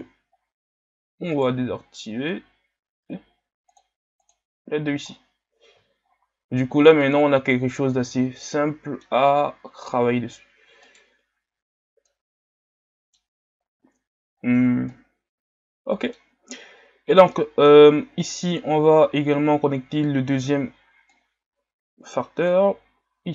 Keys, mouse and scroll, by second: 0.4 scroll up 3, 1.4-3.7 right drag, 3.7-5.1 drag, 5.1 scroll down 3, 6.1 shift+scroll up 4, 7.2-7.8 drag, 7.8 scroll down 3, 8.5-10.9 middle drag, 10.9-12.1 right drag, 12.1-14.4 middle drag, 14.4-14.9 scroll up 4, 14.9-21.1 middle drag, 21.1-22.5 drag.